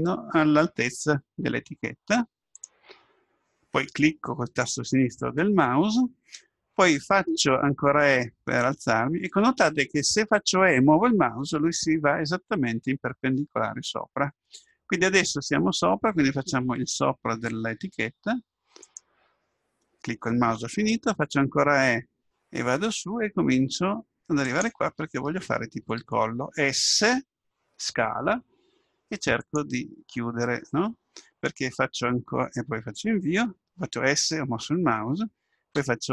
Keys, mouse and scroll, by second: 7.2 e, 21.3 e, 25.8 s, 35.8 e.